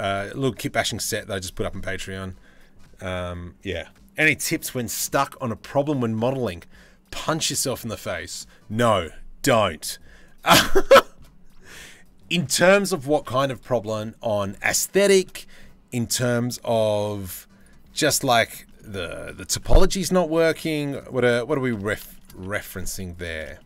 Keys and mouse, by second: 1.6 click, 7.7 click, 8.0-10.3 middle drag, 10.3 click, 10.4-13.8 shift+middle drag, 13.8 click, 14.5-15.5 shift+middle drag, 18.2 shift+middle click, 18.9 shift+middle click, 19.8-20.1 shift+middle drag, 20.5 middle click, 21.4 Tab, 21.8 shift+middle click, 22.3 2, 23.2 shift+middle click.